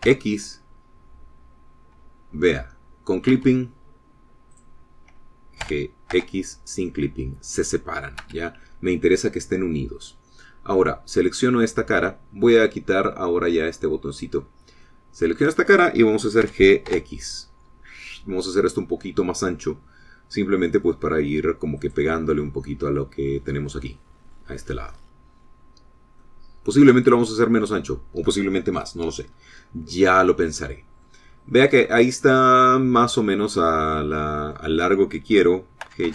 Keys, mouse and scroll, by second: 0.4 g, 1.0 x, 4.2 Escape, 5.5 click, 6.6 g, 7.1 x, 9.2 Escape, 10.3 click, 11.0 middle click, 12.2 click, 15.1 click, 15.8-18.6 middle drag, 17.4 g, 17.8 x, 22.7 click, 23.2 scroll down 2, 23.6 middle click, 27.1-29.9 middle drag, 30.2 scroll up 1, 30.5 middle click, 31.2 click, 32.2 middle click, 32.2-32.5 scroll down 1, 32.8 click, 33.9 click, 34.8 click.